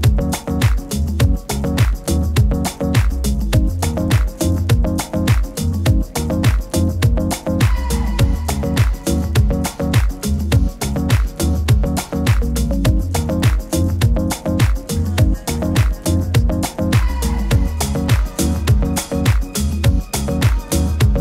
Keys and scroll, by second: 9.8 super+t.